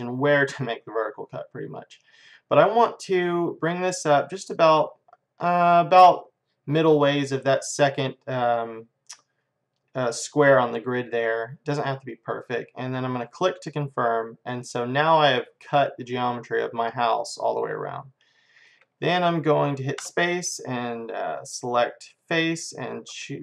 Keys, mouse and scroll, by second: 14.2-17.8 middle drag, 20.0 space, 22.8-23.4 drag.